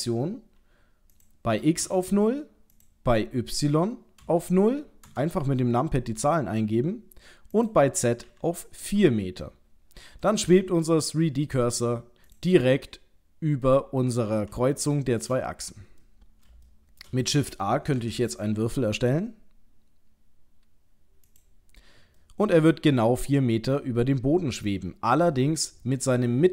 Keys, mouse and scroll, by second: 1.1 click, 2.8 click, 7.6 click, 10.3 middle click, 12.3 click, 12.6 middle click, 14.9 shift+middle click, 16.0 middle click, 16.7 shift+middle click, 18.0 shift+a, 22.2 middle click.